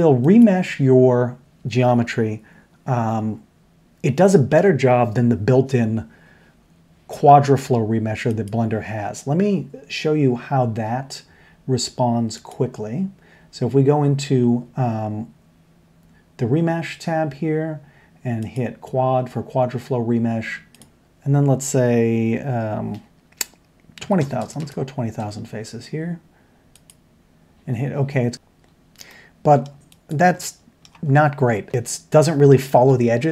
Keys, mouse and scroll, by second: 8.3 click, 12.4 click, 18.4 click, 20.7-28.0 drag, 24.4 KP_0, 28.6-29.9 middle drag, 30.0 click, 30.3-30.8 middle drag, 31.7 Tab, 31.7-32.1 middle drag.